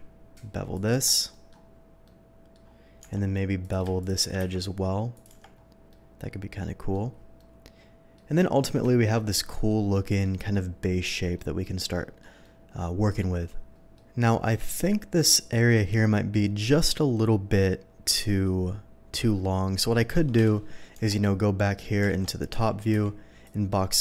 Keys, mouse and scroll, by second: 0.7 click, 1.0 Tab, 1.3 middle drag, 2.0-2.5 middle drag, 3.6 click, 4.0 shift+click, 4.4 ctrl+b, 5.1 click, 5.4 Tab, 5.9-6.9 middle drag, 7.3-8.1 middle drag, 8.9 shift+middle drag, 9.2-9.6 shift+middle drag, 9.9-10.2 shift+middle drag, 10.5-11.0 shift+middle drag, 11.3-12.2 shift+middle drag, 12.4-13.1 middle drag, 13.7 middle drag, 14.3 middle click, 14.6 shift+middle drag, 20.6 KP_7, 20.9 Tab, 22.1 alt+a, 22.6 z, 22.9 b, 23.4 click.